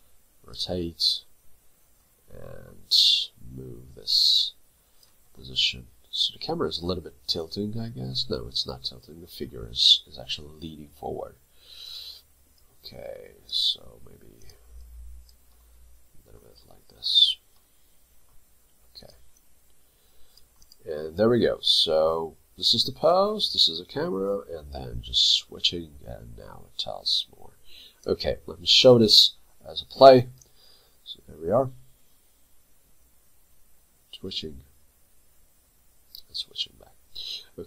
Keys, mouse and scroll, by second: 0.9 middle click, 14.8 double click, 15.6 middle click, 19.4 double click, 20.8 right click, 30.4 ü.